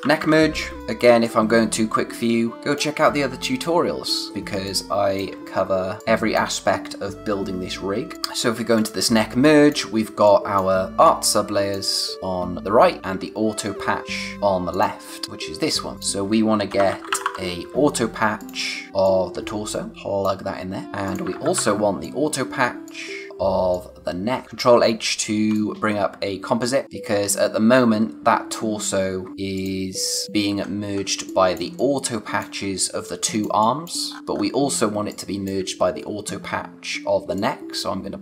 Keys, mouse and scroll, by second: 0.0-0.8 typing, 1.2 click, 4.6 click, 5.0 space, 5.6-6.0 scroll down 1, 6.0 click, 6.3 space, 8.1-8.7 scroll up 1, 8.7 click, 9.4 click, 14.7 click, 15.2 space, 15.9 click, 16.7-17.7 typing, 18.4 click, 20.8 scroll up 1, 21.0 click, 21.3 ctrl+c, 21.5 ctrl+v, 22.0 click, 23.3 space, 23.7 click, 24.4 h, 25.5 click, 26.8 click, 29.5 click, 30.5-30.8 scroll down 1, 31.1 space, 31.3 click, 31.6 space, 33.2 click, 33.6 space, 34.1-34.9 scroll up 1, 34.9 space, 35.1 click, 35.4 space, 37.3 click.